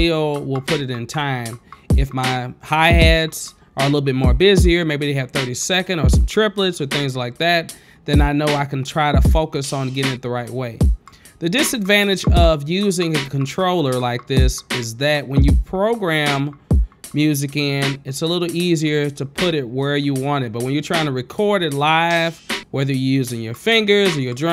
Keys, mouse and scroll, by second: 8.0 space, 8.7 click, 9.8 click, 10.4 click, 12.4 click, 14.6 click, 15.5 click, 16.8 click, 17.4 click, 17.4 right click, 20.8 q, 21.9 q, 23.7 click.